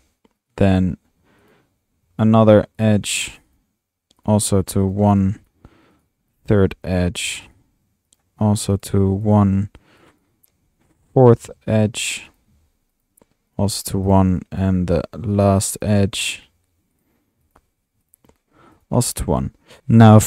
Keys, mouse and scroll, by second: 0.4-0.9 drag, 1.6-2.1 drag, 2.1 typing, 2.9-3.8 drag, 4.2-4.5 drag, 4.8 click, 5.5-5.9 drag, 6.0 middle click, 6.5 drag, 6.6 typing, 7.6-7.9 drag, 8.1 click, 8.7-9.1 drag, 9.2 click, 10.0-10.5 drag, 11.0 click, 11.4 click, 11.5 typing, 12.4 drag, 13.1 click, 13.8 click, 14.1 click, 15.3-16.0 drag, 16.1 typing, 17.0 click, 19.5-20.2 typing.